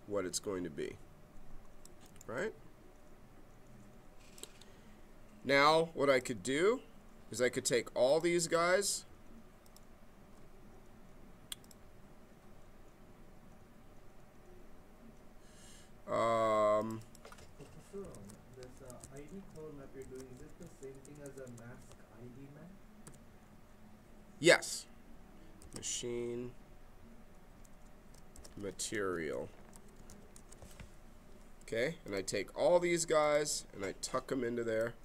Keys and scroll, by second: 17.7-21.1 typing, 23.0 shift+-, 25.6 shift+m, 27.7-30.6 typing.